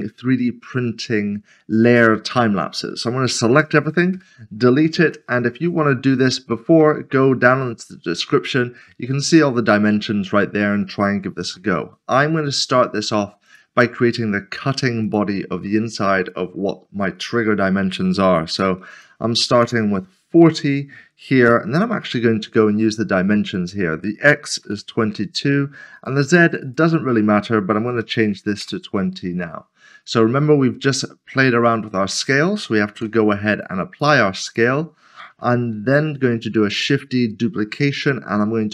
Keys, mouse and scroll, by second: 3.5 a, 5.1 a, 5.3 middle click, 5.6 scroll down 1, 9.1 scroll down 1, 9.3 middle click, 11.2 middle click, 13.5 a, 15.0 click, 18.5-18.9 typing, 19.6 Return, 20.7 scroll down 1, 21.9 n, 23.5 click, 24.7 typing, 26.0 click, 27.9 typing, 28.6 Return, 32.9 ctrl+a, 34.0 double click, 34.5 click, 35.7 typing, 36.8 right click.